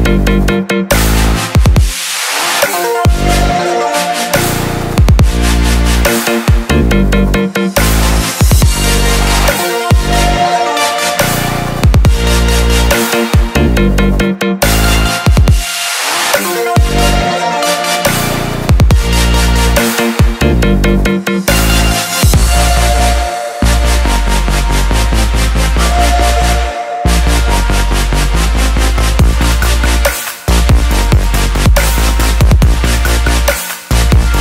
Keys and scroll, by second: 33.7 Delete.